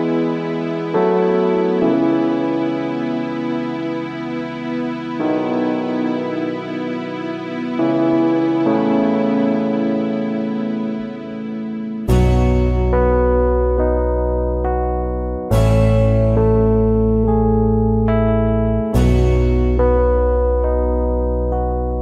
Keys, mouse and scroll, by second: 3.0 alt+scroll down 1, 5.0 alt+click, 6.8 alt+scroll up 1, 8.7 ctrl+shift+a.